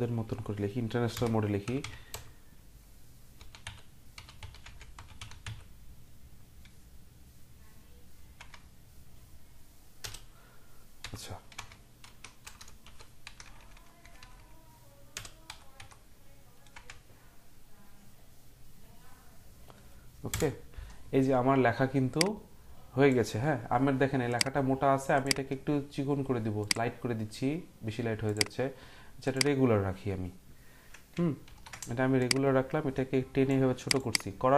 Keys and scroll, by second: 1.1-6.0 typing, 8.3 BackSpace, 13.6-15.1 typing, 20.3 Return, 31.4 ctrl+t.